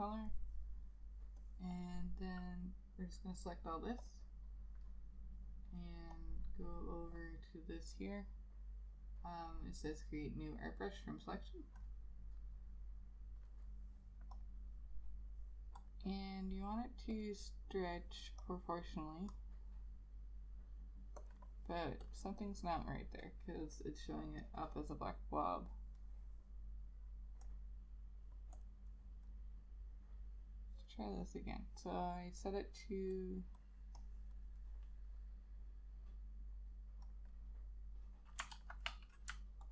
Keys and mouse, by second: 22.5 double click, 34.1 double click, 38.7 ctrl+a.